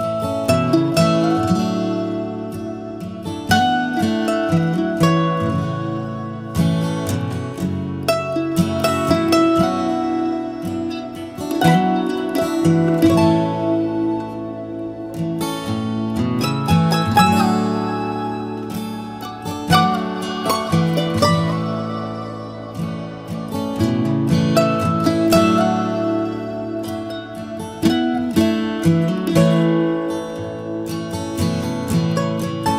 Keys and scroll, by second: 25.6 Return.